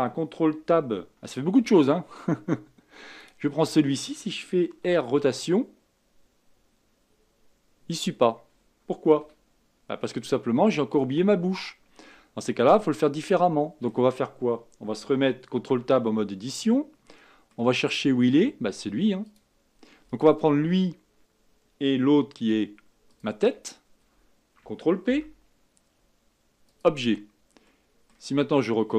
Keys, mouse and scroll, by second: 1.6 ctrl+Tab, 3.2 click, 4.8 r, 10.4-12.7 scroll up 5, 12.7-13.2 scroll down 3, 13.2-15.5 middle drag, 15.5 ctrl+Tab, 16.7-17.8 middle drag, 17.8-19.2 scroll up 4, 19.2 click, 23.1 shift+click, 25.0 ctrl+p, 27.6-28.3 middle drag, 28.3-28.7 scroll down 4.